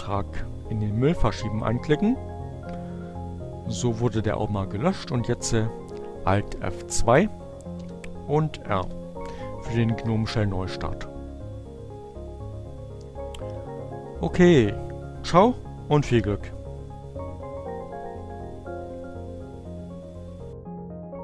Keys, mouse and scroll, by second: 4.0 alt+F2, 6.7 r, 6.9 Return.